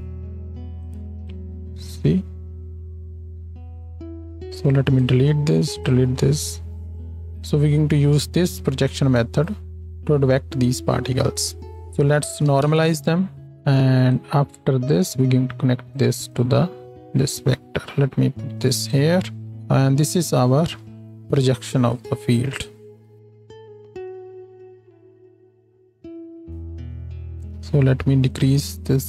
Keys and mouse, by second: 4.3-5.7 drag, 5.1 x, 5.9-19.6 drag, 5.9 x, 11.7-14.1 middle drag, 11.7-14.1 right drag, 14.9-21.4 middle drag, 14.9-19.6 right drag, 20.5 ctrl+j, 21.4-27.3 drag, 22.0 F2, 24.3 shift+Left, 24.9 space, 26.1 space, 28.3-29.0 drag, 28.3-29.0 middle drag, 28.3-29.0 right drag.